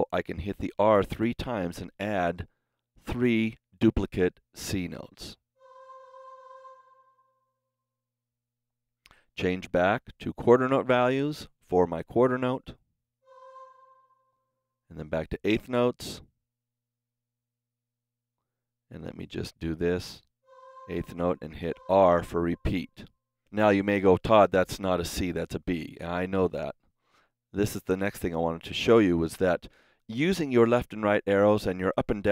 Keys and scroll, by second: 5.4 r, 21.5 r.